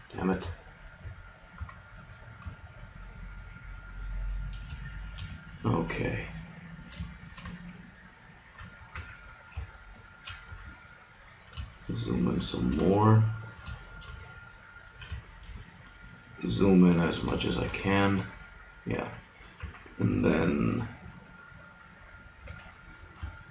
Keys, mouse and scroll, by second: 1.0-1.6 scroll up 1, 1.6 scroll up 1, 1.6 KP_Decimal, 2.5-4.2 middle drag, 4.2 middle click, 8.9 g, 9.9 click, 10.6 middle click, 12.2 middle click, 19.6 g.